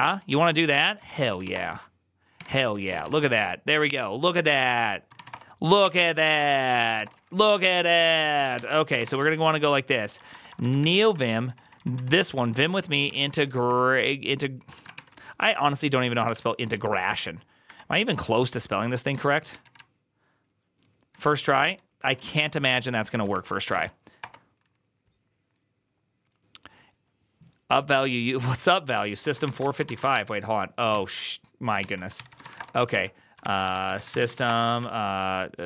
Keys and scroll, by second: 0.0-3.6 typing, 0.6 ctrl+c, 2.2 Tab, 2.5 ctrl+c, 4.8-11.2 typing, 8.1 ctrl+a, 8.4 ctrl+c, 11.3 ctrl+Left, 11.5 ctrl+Left, 11.8 ctrl+Right, 12.3 ctrl+Right, 12.3-14.8 typing, 14.6 ctrl+a, 16.0-22.2 typing, 22.0 ctrl+a, 23.2 ctrl+w, 23.6 ctrl+v, 24.0 Return, 29.1-30.3 typing, 30.8 ctrl+t, 31.6 ctrl+n, 32.0 ctrl+c, 32.1-35.6 typing, 33.3 ctrl+c.